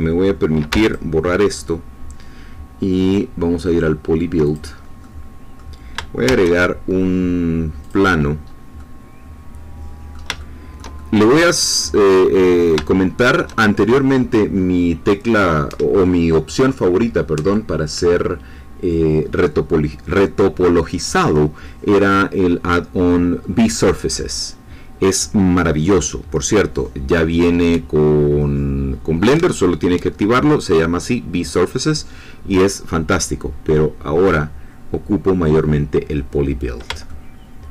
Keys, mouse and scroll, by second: 0.7 x, 0.8 click, 1.4 scroll up 2, 4.4 click, 5.0 middle click, 6.3 shift+a, 7.8 click, 8.4-8.7 scroll up 1, 8.7-11.4 middle drag, 11.7-13.5 middle drag, 37.0 shift+middle click.